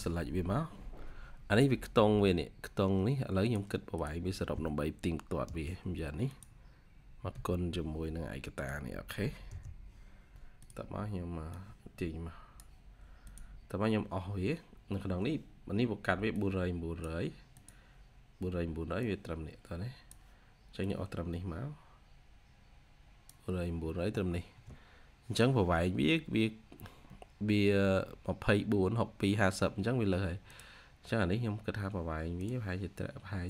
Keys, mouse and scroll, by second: 5.3 typing, 9.3 Return.